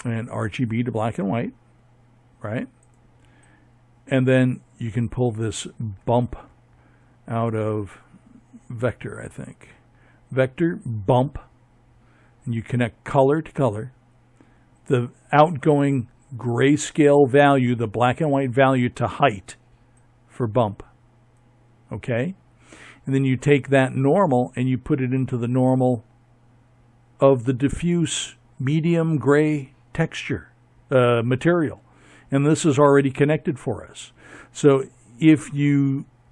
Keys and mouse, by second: 35.2 KP_7.